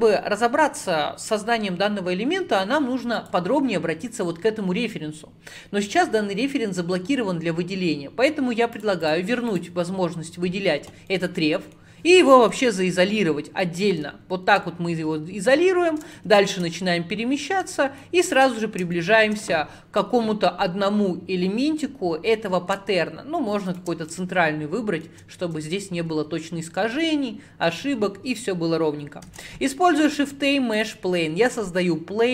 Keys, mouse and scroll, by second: 3.2 click, 6.8-7.4 scroll down 15, 8.8 click, 9.1 click, 9.6 click, 10.4 scroll down 2, 11.2-12.5 middle drag, 12.5 /, 13.7-14.8 middle drag, 14.8-15.5 scroll up 12, 16.2 shift+middle click, 16.8-17.3 scroll up 3, 17.3-18.1 scroll up 3, 18.1 shift+right click, 18.7-19.0 scroll up 1, 19.0-22.1 shift+middle drag, 23.7 shift+right click, 24.2-27.2 shift+middle drag, 30.9 shift+a.